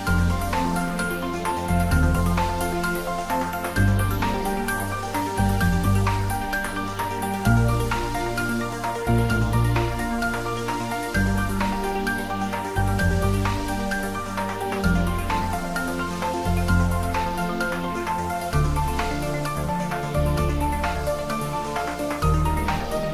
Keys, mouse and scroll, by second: 0.2 middle click, 1.2-1.6 typing, 4.2 click, 4.6-5.6 typing, 10.4 click, 11.0-13.1 middle drag, 13.1-14.1 scroll up 1, 14.8 e, 16.6 click, 17.0-17.3 scroll up 1, 17.3-18.6 middle drag, 18.6-19.1 scroll down 1, 19.1 middle click, 20.4 scroll up 1, 21.5 ctrl+b.